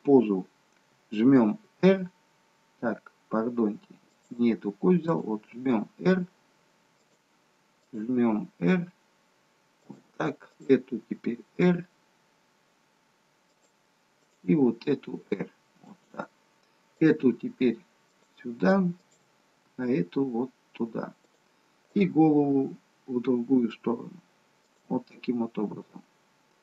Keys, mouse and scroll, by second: 1.7 r, 5.0 click, 5.4 r, 8.1 r, 10.4 click, 11.0 r, 14.1 click, 14.5 r, 16.9 click, 17.3 r, 19.0 click, 19.7 r, 21.9 click, 22.1 r.